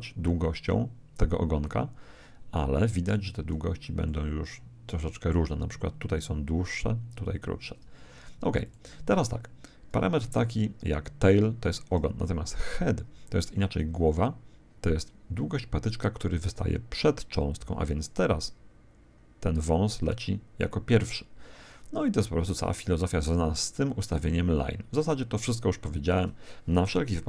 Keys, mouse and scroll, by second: 4.0-5.8 middle drag, 8.6-12.1 drag, 13.7 click.